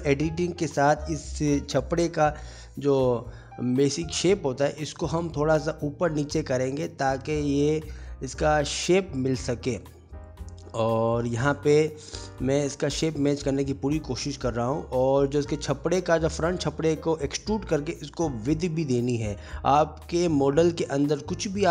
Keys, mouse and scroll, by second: 0.5 g, 1.8 middle click, 2.3 alt+z, 2.4 alt+z, 2.6 shift+click, 3.5 shift+click, 7.6 g, 10.4 middle click, 10.5 Tab, 10.6 middle click, 10.9 g, 11.3 middle click, 11.6 click, 11.9 middle click, 12.4 click, 12.8 alt+z, 12.9 middle click, 13.5 Tab, 13.6 middle click, 13.7 3, 13.9 click, 14.0 a, 14.1 middle click, 14.3 e, 15.4 middle click, 15.6 Tab, 15.7 scroll up 1, 15.8-16.5 scroll down 5, 16.0 middle click, 16.5 middle click, 16.8 click, 17.1 g, 17.1 middle click, 17.7 shift+middle click, 17.9 shift+middle click, 18.4 alt+middle click, 18.5 alt+middle click, 18.7 shift+middle click, 18.8 shift+middle click, 18.9 click, 19.1 Tab, 19.2-21.7 typing, 19.4-19.8 shift+click, 19.7 shift+click, 20.7 middle click, 21.5 middle click.